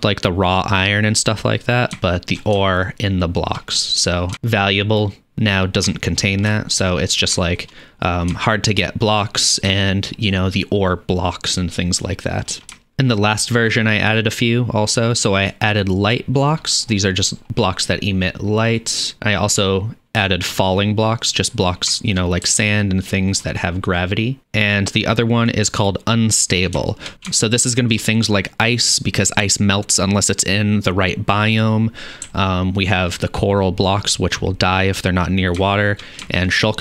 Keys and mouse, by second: 1.7-2.7 shift+drag, 2.7-3.7 shift+drag, 3.7 middle click, 3.9-5.1 drag, 5.4 click, 5.8 click, 5.9 shift+middle drag, 6.4 click, 6.5 shift+middle drag, 6.8 shift+click, 7.0 click, 7.3 shift+drag, 7.5 shift+click, 7.7 middle click, 7.9-8.5 drag, 8.6-9.1 shift+drag, 9.7 shift+click, 9.7 shift+middle click, 10.2-12.0 shift+drag, 12.4-12.8 shift+drag, 12.8 shift+middle click, 12.9-16.7 drag, 16.8-21.5 drag, 21.6-21.9 drag, 22.0 shift+middle click, 22.7 ctrl+middle click, 23.1 ctrl+click, 23.2 ctrl+middle click, 23.4 ctrl+middle click, 24.0-25.7 drag, 26.9 shift+middle click, 27.3 shift+middle drag, 27.6 shift+middle click, 28.1-32.6 drag, 32.7 ctrl+click, 33.0-35.3 drag, 35.6 shift+middle drag, 36.1 click.